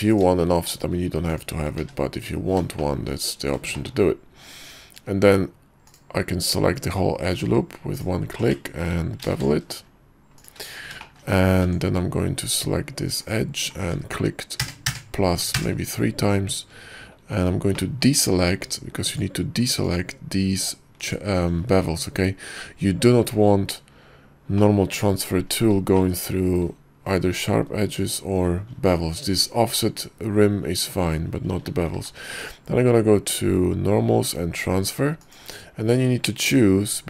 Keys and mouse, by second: 1.4 shift+click, 1.9 1, 3.0 shift+middle click, 3.9 shift+middle click, 5.0 Tab, 9.3 ctrl+b, 11.2 shift+click, 11.8 Tab, 14.7 ctrl+KP_Add, 15.0 ctrl+KP_Add, 15.7 ctrl+KP_Add, 19.9 alt+shift+click, 21.1 alt+shift+click, 24.7 middle click, 26.0 shift+middle click, 30.8 middle click, 32.1 y.